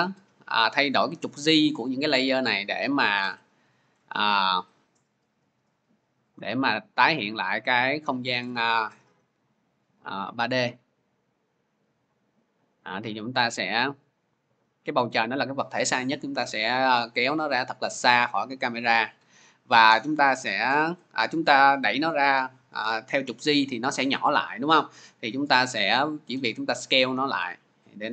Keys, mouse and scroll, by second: 3.0 click, 3.8-4.2 scroll, 7.4 click, 8.3-9.1 scroll, 9.2-9.6 scroll, 14.9-18.0 drag, 16.1-18.0 middle drag, 16.1 scroll, 20.1 scroll, 20.7 shift+click, 25.8 shift+click, 28.0-28.1 middle drag, 28.0 scroll.